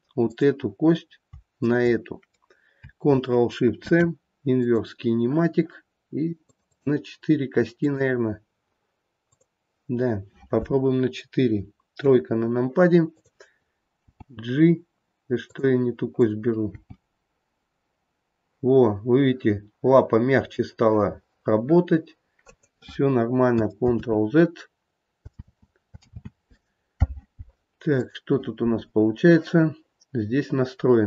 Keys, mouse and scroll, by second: 1.7 shift+click, 4.8 ctrl+shift+c, 6.5 click, 6.8 click, 7.8 click, 9.2 click, 12.0 KP_3, 13.1 click, 14.1 g, 16.2 click, 16.7 g, 23.9 ctrl+z, 25.4 ctrl+z, 26.2 ctrl+z, 28.0 click.